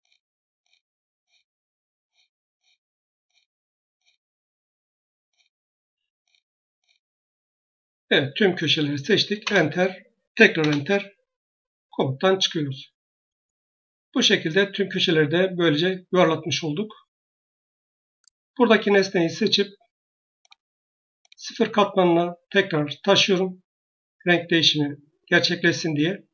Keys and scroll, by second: 9.3 Return, 22.6 Escape.